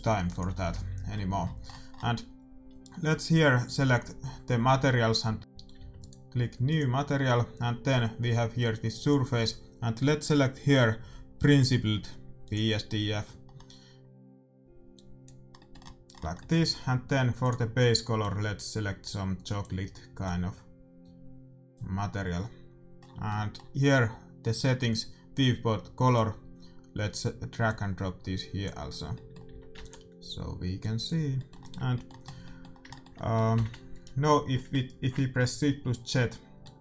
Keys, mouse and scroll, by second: 2.8-5.4 middle drag, 5.4 ctrl+z, 5.7 a, 6.3-7.7 right drag, 6.6-8.4 drag, 8.9-10.6 drag, 13.4-14.9 middle drag, 14.9 click, 17.4-22.1 drag, 24.1-26.0 middle drag, 26.0-29.6 drag, 28.8-30.9 middle drag, 29.6 a, 29.7 ctrl+s, 30.7-32.6 drag, 31.3 middle click, 32.5-34.9 middle drag, 34.7 shift+z, 36.6-36.8 middle drag.